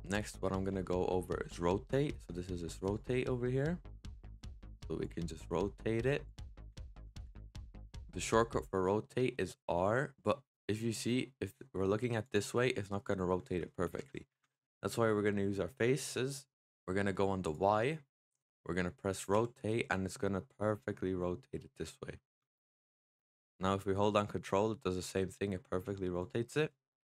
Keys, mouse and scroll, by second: 0.0-2.7 middle drag, 2.7 click, 3.4-4.9 middle drag, 4.9 click, 6.7 ctrl+z, 9.5 r, 12.4-13.8 middle drag, 13.8 ctrl+z, 14.4-16.8 middle drag, 17.3 click, 19.2 r, 26.6-27.0 middle drag.